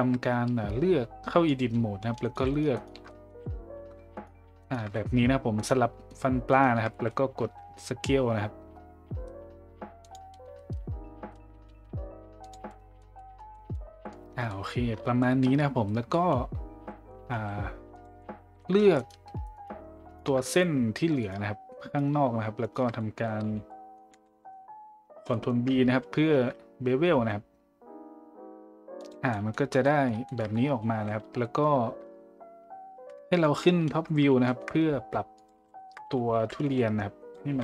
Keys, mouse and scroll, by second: 0.0-29.0 drag, 31.8-37.6 drag.